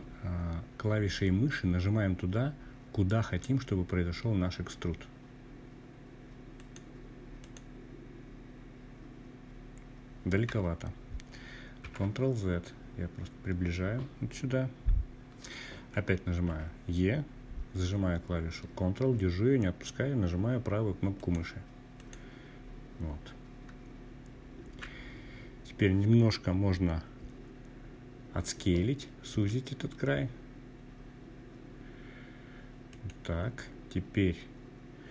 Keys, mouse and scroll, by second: 4.5-5.5 ctrl+right drag, 9.8 ctrl+z, 14.4 e, 19.3 ctrl+right click, 27.3 s, 30.9 click, 34.6 e.